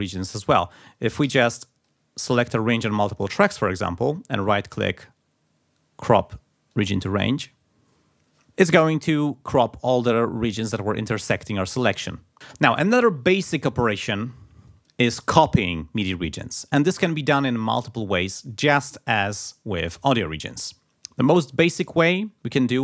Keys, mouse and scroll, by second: 1.2 r, 2.1-3.4 drag, 4.4 right click, 6.7 click, 12.1 scroll down 2.